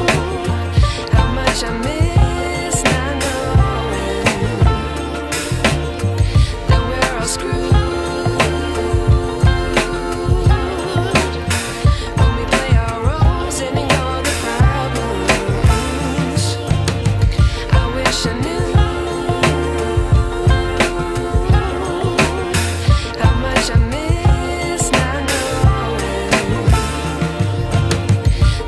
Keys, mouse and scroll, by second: 3.8 ctrl+e, 5.1 space, 5.3-7.2 ctrl+drag, 13.0 space, 13.7-14.3 alt+drag, 15.1-16.0 ctrl+drag, 17.1-18.7 drag, 22.0 click, 24.6-25.9 drag.